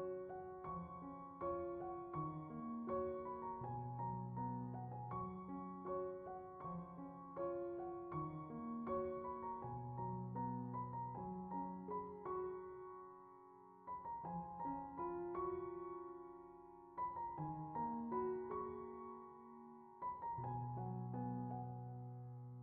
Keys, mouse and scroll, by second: 1.3 click, 4.3 middle click, 5.0-6.2 drag, 6.3-7.4 drag, 10.6-15.0 middle drag, 15.6-17.2 drag, 18.8 click, 21.9 click.